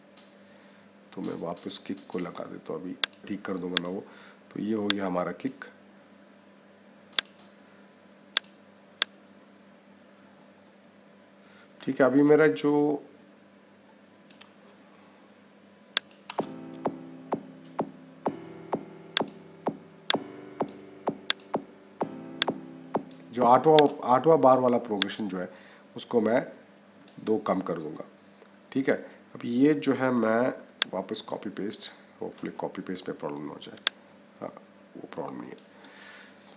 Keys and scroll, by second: 16.1 -.